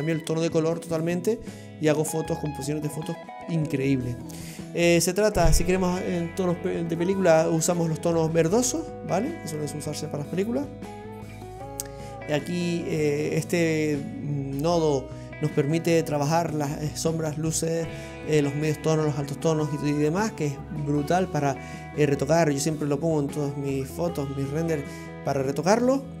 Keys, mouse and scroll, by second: 0.0-3.9 scroll down 11, 4.3-7.1 scroll up 18, 7.1-8.7 scroll up 3, 8.7 click, 11.7 scroll down 3, 12.2 middle click, 25.9-26.2 scroll down 3.